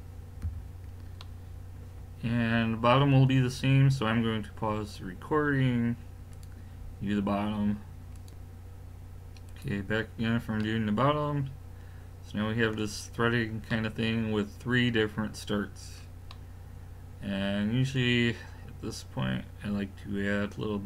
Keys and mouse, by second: 0.4 a, 10.6 middle click, 13.2 middle click, 15.9 middle click, 18.3-20.8 middle drag.